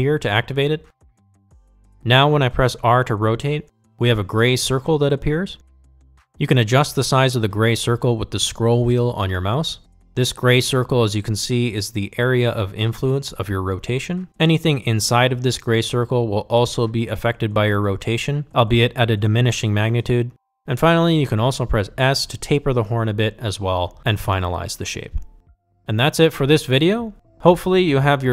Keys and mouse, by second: 3.5 r, 22.9 s.